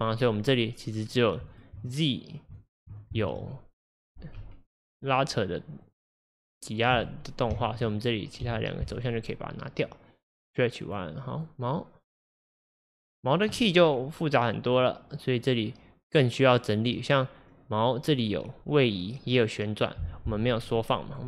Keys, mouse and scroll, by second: 1.1 click, 1.5 ctrl+click, 2.6 ctrl+click, 3.2 shift+click, 4.4 Delete, 5.9 click, 7.0-8.5 drag, 8.5 Delete, 10.9 click, 11.4 click, 12.3 drag, 14.8-21.2 drag.